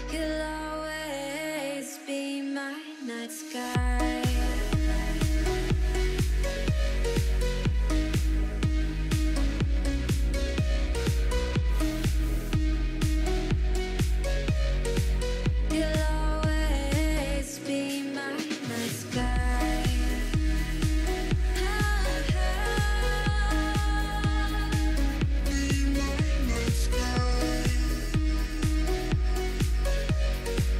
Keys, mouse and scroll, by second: 0.3 click, 1.2 KP_3, 1.5-1.9 scroll up 2, 1.9 Tab, 2.5-2.9 scroll up 1, 2.9 ctrl+r, 4.8 ctrl+r, 6.7 ctrl+r, 8.9 shift+middle click, 9.1-9.6 scroll up 1, 9.6 ctrl+r, 10.5-12.0 middle drag, 12.1 ctrl+r, 13.9 ctrl+r, 14.8-15.1 scroll down 3, 15.1-17.3 middle drag, 18.1 scroll down 3, 18.3 click, 18.5 Tab, 18.6 click, 19.4 middle click, 20.0 KP_1, 21.8 click, 22.1 click, 22.4 click, 22.6 click, 22.8 click, 23.0 click, 23.4 click, 23.8-24.8 scroll up 2, 24.8 click, 25.3-26.9 middle drag, 27.0 click, 28.8 click, 29.8 Tab, 30.3 KP_1.